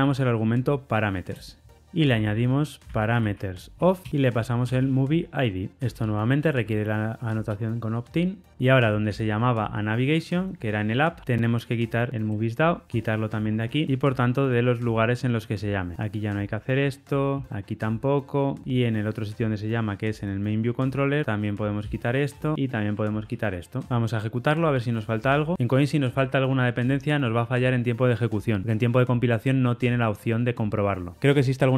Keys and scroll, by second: 1.2 Return, 1.9 Escape, 4.0 Return, 9.0 ctrl+alt+o, 13.0 ctrl+shift+Right, 13.8 ctrl+shift+Left, 13.8 super+b, 17.4 super+BackSpace, 17.4 ctrl+y, 18.6 super+b, 24.4 ctrl+r, 24.4 shift+F10.